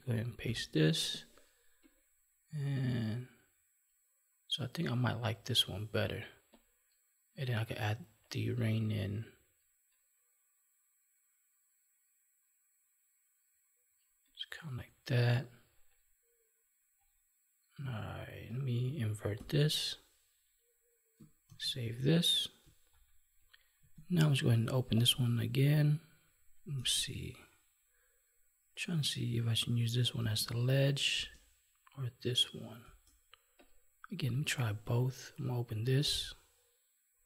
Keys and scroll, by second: 0.4 ctrl+v, 19.3 ctrl+i, 21.4 ctrl+s, 24.0 alt+Tab, 26.7 space, 32.8 space.